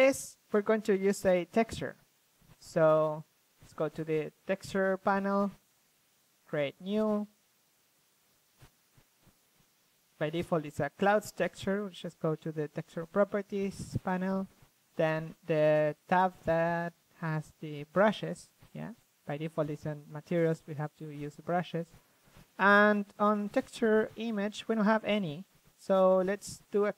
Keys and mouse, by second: 1.3-3.6 drag, 3.4-4.6 middle drag, 6.2-9.7 middle drag, 9.7-11.1 drag, 11.1-13.7 middle drag, 13.7-14.8 drag, 14.8 middle click, 15.1-16.5 drag, 16.5-17.5 middle drag, 17.5-18.7 drag, 20.4-22.0 drag, 22.7-26.9 drag.